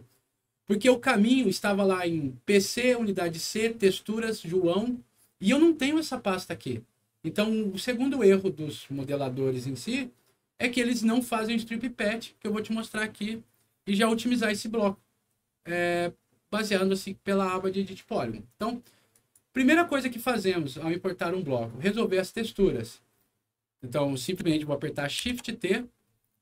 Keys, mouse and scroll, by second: 19.0 click, 24.0 click, 25.2 shift+t.